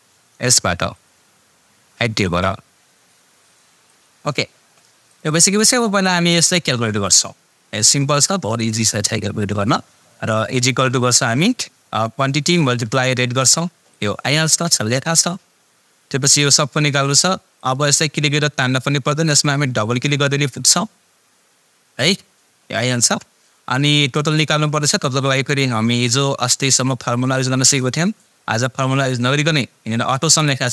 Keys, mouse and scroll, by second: 0.9 click, 1.8 click, 3.8 click, 10.9 =, 12.1 click, 17.6 click, 19.9 click, 26.5 click.